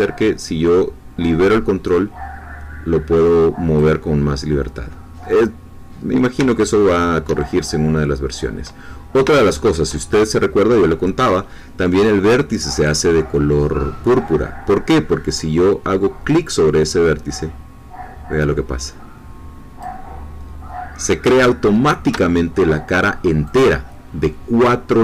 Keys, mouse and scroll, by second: 5.8-6.3 scroll down 2, 6.6 shift+middle click, 7.6-8.0 shift+scroll up 3, 8.2-8.8 scroll down 2, 9.5 shift+middle click, 16.3-20.0 drag, 21.4-22.6 shift+middle drag, 23.4-25.0 drag.